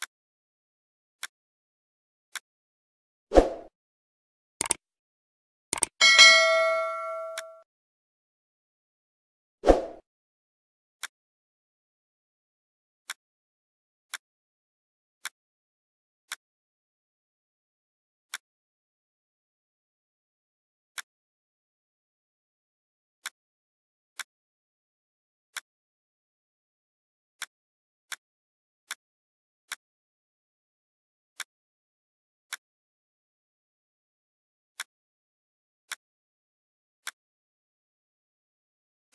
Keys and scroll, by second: 5.8 shift+Page_Up, 8.9 Right, 9.1 Down, 38.6 ctrl+g.